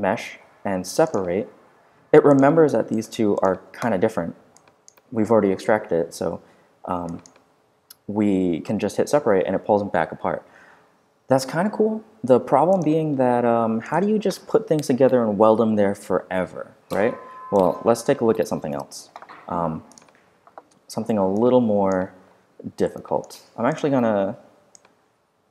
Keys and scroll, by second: 6.2 z, 12.0 z, 18.7 BackSpace, 20.4 r.